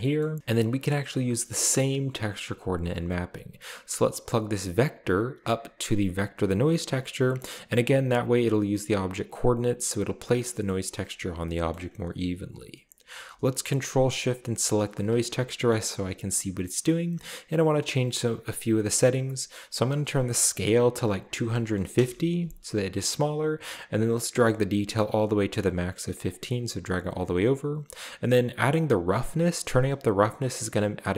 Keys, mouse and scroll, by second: 0.0-0.4 middle drag, 1.4 click, 4.8-6.9 drag, 7.3 click, 7.9 click, 10.7 middle click, 11.7 middle click, 12.5-13.2 scroll up 1, 14.6 ctrl+shift+click, 15.8-17.3 scroll up 2, 15.9 middle click, 19.7 click, 21.1-21.5 typing, 21.9 Return, 24.9 click, 26.3 click, 28.3-31.1 drag.